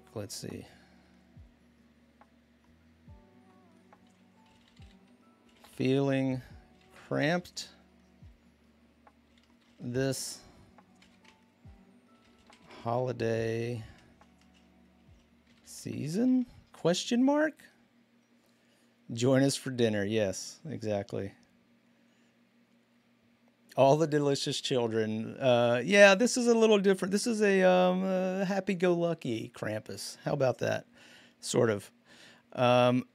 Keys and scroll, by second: 4.3-7.6 typing, 8.8-16.7 typing, 11.0 Return.